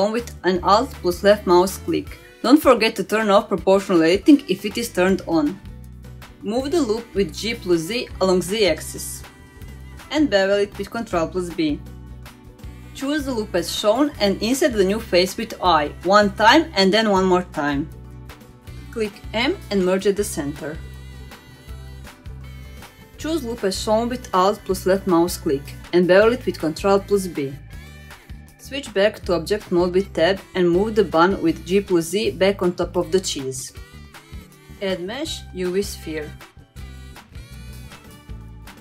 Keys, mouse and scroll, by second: 0.2 alt+click, 1.4 g, 3.9 ctrl+z, 5.4 click, 6.1 g, 8.7-9.1 scroll up 1, 9.1 middle click, 10.0 ctrl+b, 12.7 middle click, 13.1-13.4 scroll up 1, 13.9 alt+click, 15.6 alt+click, 16.1-17.0 scroll up 2, 17.0 i, 18.4 i, 21.3 m, 22.9-23.3 scroll down 2, 23.3 middle click, 24.1 scroll up 1, 24.6 alt+click, 25.0 middle click, 25.7 ctrl+b, 27.4-27.8 scroll down 2, 27.8 Tab, 28.2-28.6 middle drag, 28.9-29.3 shift+middle drag, 30.0 click, 30.7 g, 33.8-34.6 middle drag, 34.7 g, 35.4 middle drag, 35.7 click, 36.0-36.7 middle drag, 36.8 shift+middle drag, 37.1 middle drag, 38.3-38.8 drag.